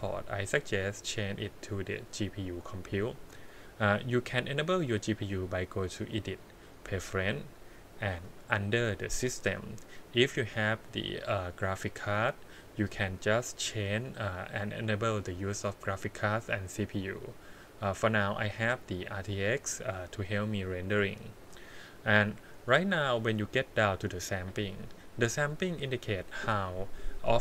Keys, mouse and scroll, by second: 4.6-6.5 drag, 23.3-26.7 scroll down 4.